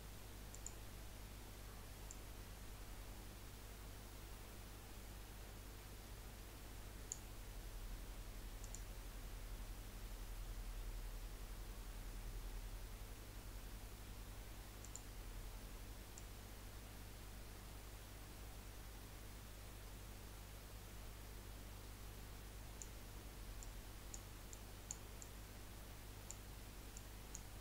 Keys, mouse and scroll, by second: 0.5 click, 2.2 click, 11.0 scroll down 3, 11.2 scroll up 1, 11.6 scroll down 1, 14.8 click.